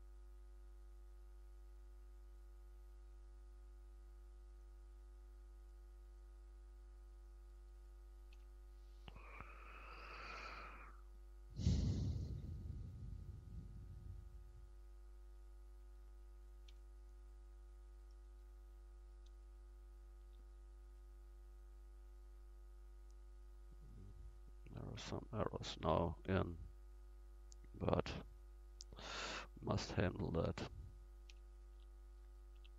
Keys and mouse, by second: 0.4 f, 8.4 f, 11.8-13.5 drag, 17.8 f, 19.6 f, 20.3 Tab, 25.9 Tab, 28.3-31.2 drag, 29.1-31.2 middle drag, 30.0-31.2 right drag, 31.3 f, 31.8 Tab, 32.6 Tab.